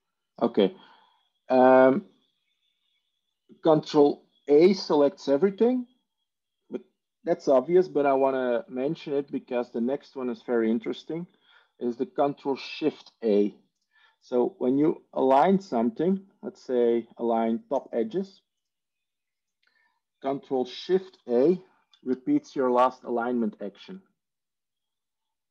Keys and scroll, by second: 22.0 ctrl+shift+a.